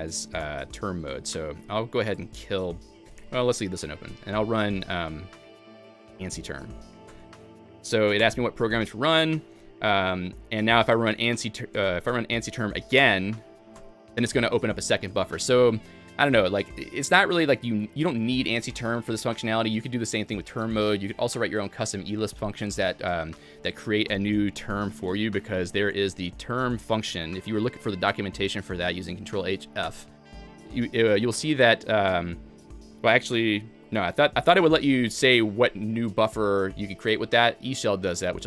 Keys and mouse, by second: 0.1-5.1 typing, 0.4 click, 2.1 click, 3.1 Escape, 5.7 Escape, 6.3 alt+x, 6.5-7.2 typing, 8.3 Return, 9.5-10.2 typing, 10.8 Return, 10.8 alt+x, 11.7 Escape, 12.0 Return, 12.0 alt+x, 12.0 a, 12.5 Return, 12.5 Escape, 12.5 alt+x, 12.5 a, 12.9 Return, 13.8 Return, 14.7-15.5 typing, 17.9-18.7 typing, 20.9-21.6 typing, 23.7-25.1 typing, 25.6 Escape, 27.2 alt+x, 27.2 Return, 27.2 ctrl+h, 27.2 a, 30.0 Escape, 30.0 alt+x, 30.0 Return, 30.0 ctrl+h, 30.0 a, 30.8 j, 31.2 alt+x, 31.2 Escape, 31.2 ctrl+h, 31.2 a, 33.5-34.6 typing, 36.2-37.0 typing.